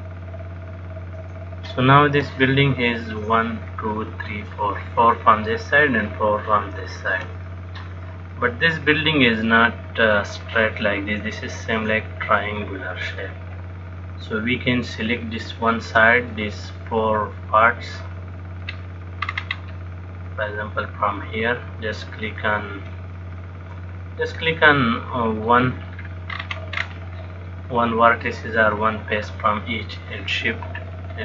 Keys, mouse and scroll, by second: 7.0 click, 8.6 middle click, 13.5 middle click, 15.6 shift+middle click, 16.5 middle click, 19.5-20.7 scroll up 4, 20.7 middle click, 22.6 click, 24.7 middle click, 26.2-26.6 scroll down 3, 26.6-27.5 scroll up 6, 28.9 click.